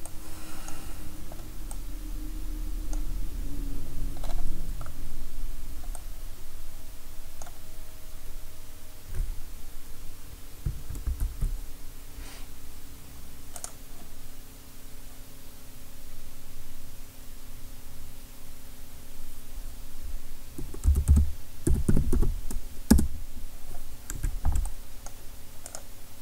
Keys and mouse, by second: 0.6 middle click, 1.0-5.3 drag, 5.3-10.6 middle drag, 11.1 shift+a, 20.9 r, 24.2 Tab, 25.7 click.